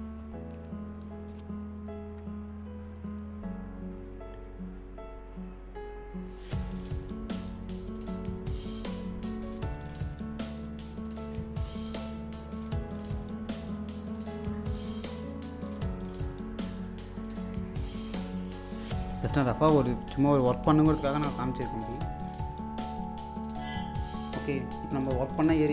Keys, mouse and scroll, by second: 0.2 Home, 1.0-2.8 drag, 2.8 click, 5.3-6.9 drag, 7.0-9.3 drag, 13.1-16.8 drag, 16.8 click, 17.2-18.1 scroll down 1, 18.1 alt+click, 25.1 click.